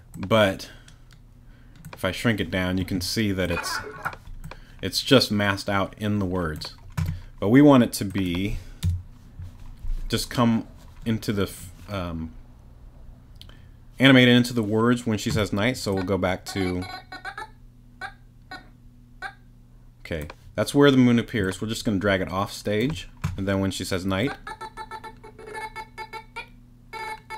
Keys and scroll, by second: 8.8 BackSpace.